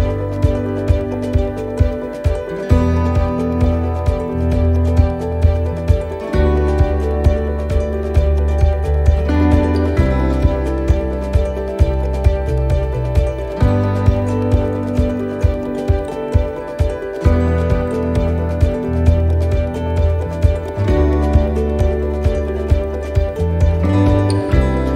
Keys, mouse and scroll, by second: 0.3 right click, 1.3 click, 2.1 shift+middle click, 3.6 click, 4.5 shift+middle click, 5.7 click, 6.7 shift+middle click, 7.1-7.7 scroll up 5, 8.3 click, 9.2 shift+middle click, 10.1 shift+middle click, 10.5-10.8 scroll down 1, 11.3-12.6 scroll down 5, 12.9 right click, 13.8 shift+right click, 15.2 shift+d, 16.2 click, 18.7 shift+middle click, 19.0-19.5 scroll up 10, 19.8 shift+middle click, 20.5 scroll down 2, 21.3 shift+middle click, 22.1 shift+middle click, 22.9 shift+middle click.